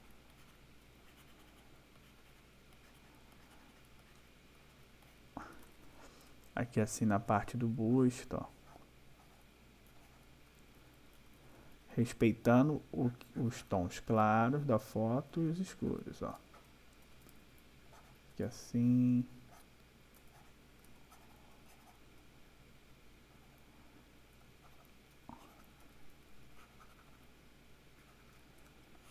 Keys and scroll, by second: 0.8 ], 5.5 \, 9.8 ], 15.2 ], 20.0 ], 28.7 space.